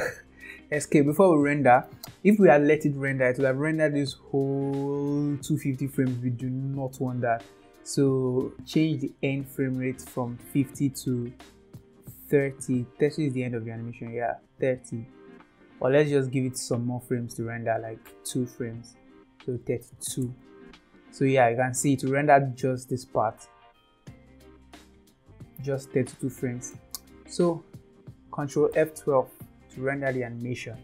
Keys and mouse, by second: 4.0-6.0 drag, 9.4-12.4 drag, 12.8 click, 17.4 click, 19.0-20.7 drag, 22.0 space, 26.6 space, 27.9 ctrl+s.